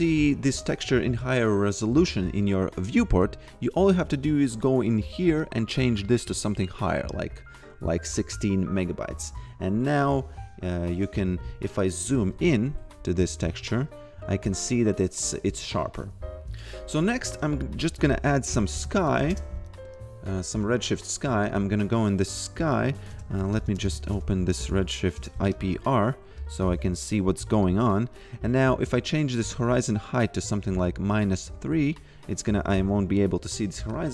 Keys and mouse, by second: 4.2 click, 10.0 click, 12.3 v, 14.4 click, 17.3-19.7 typing, 20.6 click, 22.8-24.6 typing, 25.1 Return, 26.4 click, 29.4 click, 31.3 click, 33.9 click.